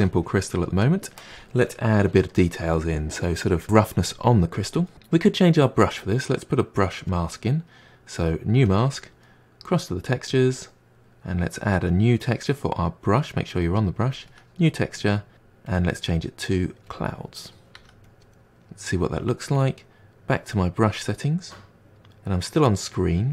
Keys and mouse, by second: 3.6 f, 7.1-8.8 drag, 10.3 click, 14.1 click, 15.7-17.7 drag, 17.7 f, 18.3-20.9 middle drag, 20.9 click.